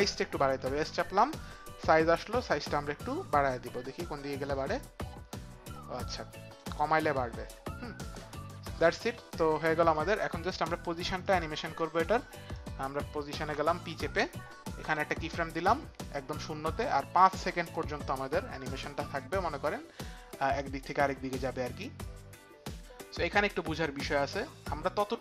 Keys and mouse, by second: 0.5 click, 0.5 s, 1.4 click, 5.7 click, 11.2 click, 12.5 click, 13.5 p, 14.8 click, 16.1 click, 22.0 click.